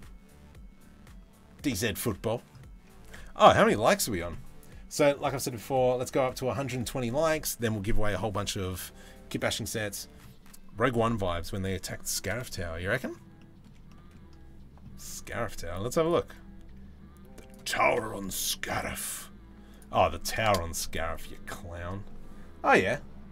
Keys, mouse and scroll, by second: 12.2 middle click, 13.0 middle click, 13.5 shift+middle click.